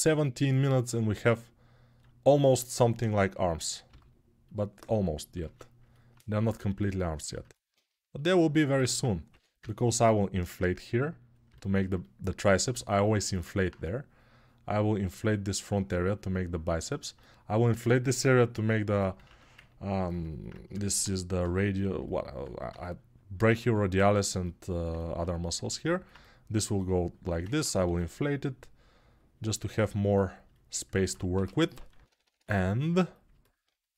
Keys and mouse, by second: 2.8-5.1 drag, 5.1-7.9 ctrl+middle drag, 6.8 ctrl+r, 7.9-33.9 shift+drag, 9.0 6, 31.1 g.